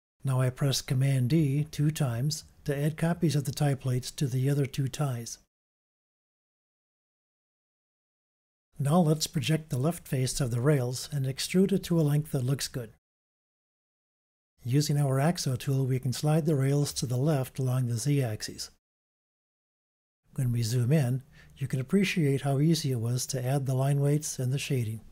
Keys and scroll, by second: 2.7 super+d, 3.7 super+d, 11.1 shift+super+], 12.7 ], 15.5 u, 19.7 v.